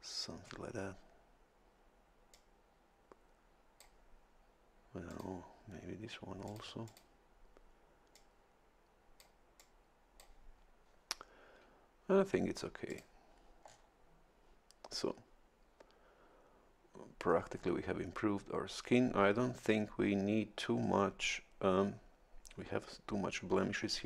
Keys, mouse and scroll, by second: 2.3-4.1 drag, 5.1 click, 6.5 click, 6.9 click, 8.1-9.4 drag, 9.6 click, 12.9 click, 13.6 scroll down 1, 17.3-17.8 scroll up 2.